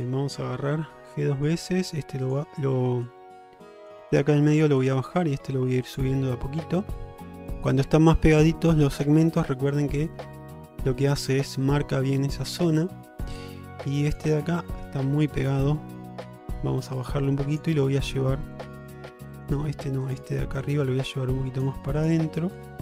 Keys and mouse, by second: 0.0 click, 0.9 g, 2.3 click, 3.2 click, 5.2 g, 6.5-7.6 middle drag, 8.1 middle click, 10.2-11.4 middle drag, 13.0 middle click, 14.2 click, 14.4-16.5 middle drag, 17.1 click, 18.8 click, 20.8 click, 22.7 click.